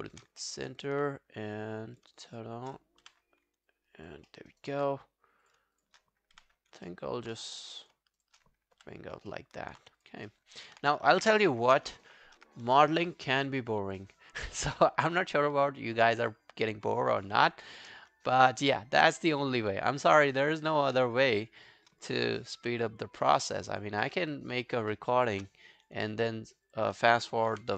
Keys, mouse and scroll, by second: 0.4 alt+middle click, 0.7 alt+right click, 2.3 shift+click, 3.4 scroll down 1, 3.7 alt+click, 4.3 alt+middle click, 4.5 alt+right click, 5.8 shift+click, 6.4 g, 6.9 alt+middle click, 8.2 shift+click, 8.8 g, 9.3 alt+middle click, 10.3 alt+middle click, 10.6 alt+right click, 11.2 shift+click, 14.1 shift+right click, 18.4 alt+middle click, 19.0 alt+middle click, 19.0 alt+scroll down 1, 19.3 alt+right click, 19.6 alt+click, 20.6 shift+click, 21.6 shift+click, 22.6 g, 23.4 alt+click, 24.0 alt+middle click, 24.4 alt+right click, 24.6 alt+click, 24.9 alt+middle click, 25.1 alt+right click, 26.7 shift+click, 27.5 g.